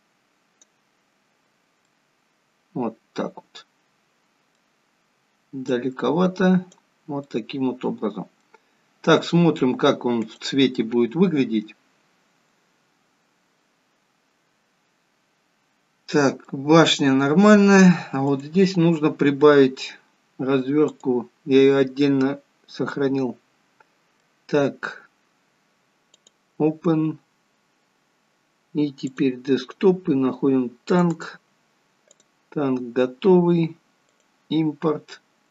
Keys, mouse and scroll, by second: 1.2 scroll up 4, 1.8 middle click, 5.5 click, 7.1 middle click, 10.6 click, 15.7 scroll up 4, 16.4 middle click, 17.6-18.2 scroll down 2, 18.2 click.